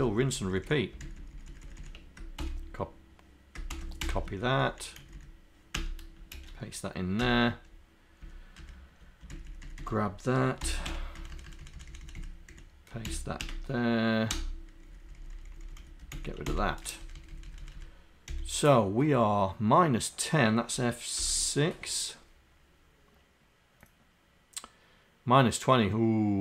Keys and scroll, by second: 14.9 Down, 17.0 Up.